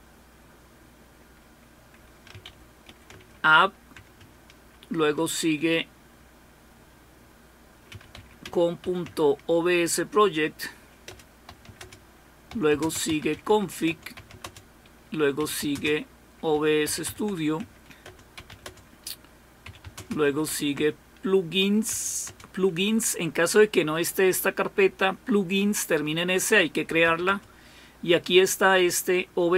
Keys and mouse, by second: 3.1-4.2 typing, 8.4-8.8 typing, 9.0 Tab, 11.1 Return, 11.2-22.3 typing.